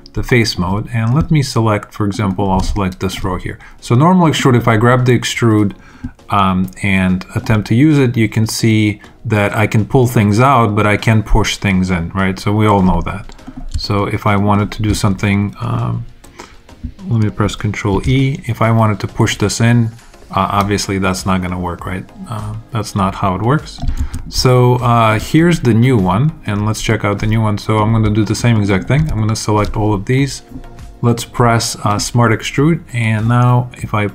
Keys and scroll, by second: 17.8 super+e, 23.9 super+z.